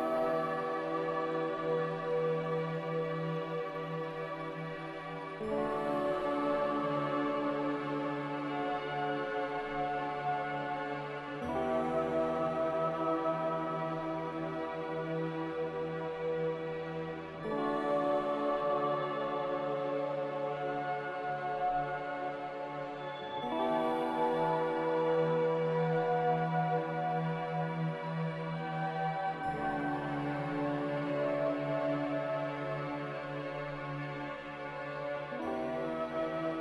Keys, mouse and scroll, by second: 23.8 r, 26.4 a, 31.0-31.9 typing, 33.4 typing, 33.7 Return, 34.7 z.